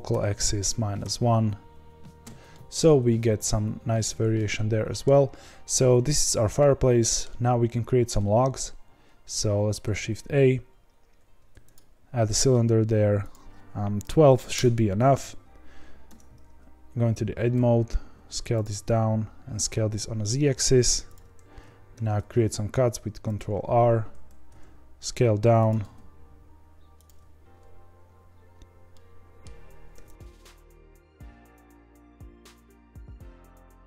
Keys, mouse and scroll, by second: 2.5-2.8 middle drag, 2.8 scroll down 1, 4.4-5.1 middle drag, 5.1-6.5 scroll down 1, 6.5-11.7 middle drag, 11.7 shift+a, 14.5-16.0 drag, 16.0 Tab, 17.5 s, 18.6 s, 21.9 ctrl+r, 24.4 s, 25.7 s, 28.1-28.9 scroll up 2, 28.9-29.9 middle drag, 29.9 3, 30.1 click, 30.3 middle click, 30.8 i, 31.2 g, 31.7 1, 31.8 click, 32.0 ctrl+b, 32.6 ctrl+t, 32.9 click, 33.0 g, 33.7 2.